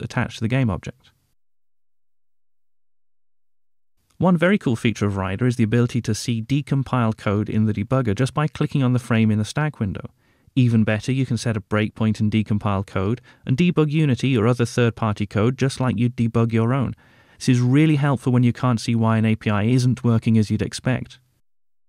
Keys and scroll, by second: 14.4 alt+super+r, 18.3 F7.